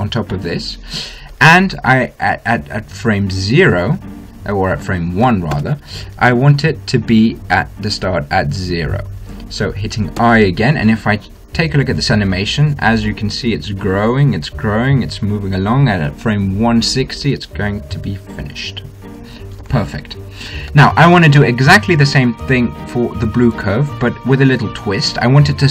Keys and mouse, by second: 1.5 i, 4.1-7.3 drag, 8.2-10.2 drag, 11.0 i, 12.6 alt+a, 20.5 alt+a, 24.3-25.7 drag.